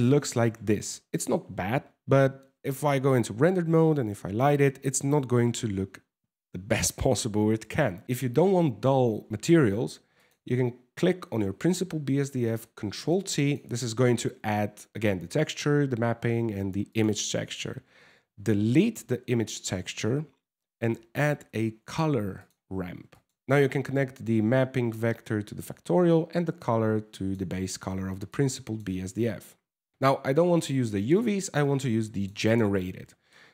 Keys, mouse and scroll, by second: 0.3 middle click, 7.9 scroll up 3, 8.0 shift+middle click, 9.8 click, 11.8 ctrl+t, 12.1 middle click, 12.4 scroll up 2, 12.7 click, 16.5 click, 18.6 x, 19.2 shift+a, 23.4 click, 25.7 click, 27.9 click, 28.8 middle click, 29.9 shift+middle click, 30.8 click, 32.9 middle click.